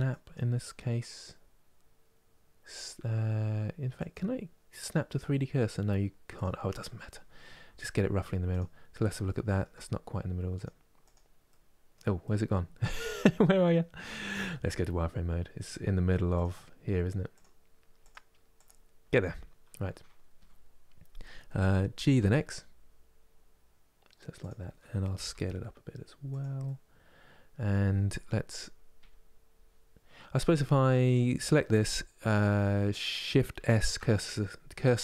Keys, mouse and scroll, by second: 3.6-6.6 drag, 6.8-8.1 scroll up 2, 8.1 click, 8.9-10.2 shift+middle drag, 10.2 click, 11.1-14.0 middle drag, 14.0 z, 17.0-18.3 drag, 19.5 KP_3, 21.6 g, 26.3-28.2 middle drag, 28.2 KP_1, 30.7-33.4 drag, 33.4 shift+s.